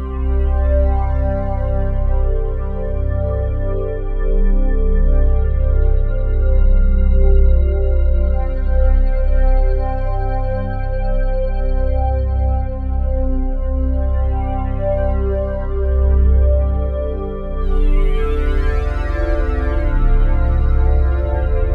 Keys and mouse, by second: 0.6-4.9 typing, 6.0-8.9 drag, 8.6-9.4 typing, 9.5-10.8 ctrl+alt+drag, 10.4-13.0 typing, 10.6 ctrl+alt+middle click, 10.8 middle click, 10.9-12.2 drag, 16.2 click, 17.0 Tab, 18.5-20.0 drag, 21.5 click.